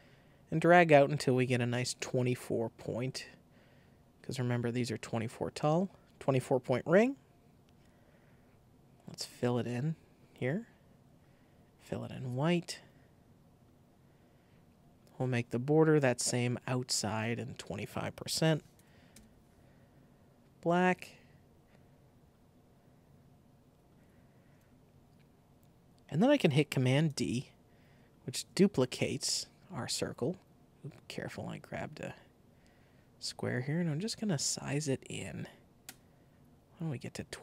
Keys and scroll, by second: 18.2 super+a, 18.5 super+2, 18.7 5, 19.0 Return, 27.0 super+d, 27.9 alt+shift+super+d.